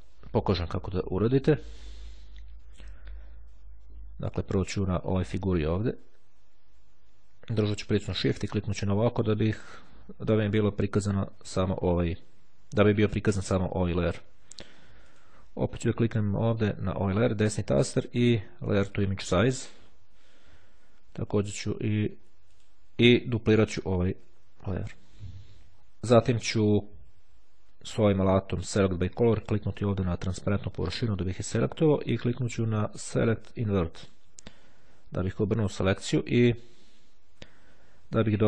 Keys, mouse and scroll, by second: 7.0 shift+click, 14.0-14.6 scroll up 1, 15.0 click, 15.8-17.8 right drag, 19.1 click, 21.6 click, 22.7 click, 24.6 click, 28.5 click, 29.8 click, 33.0 click, 34.0 click.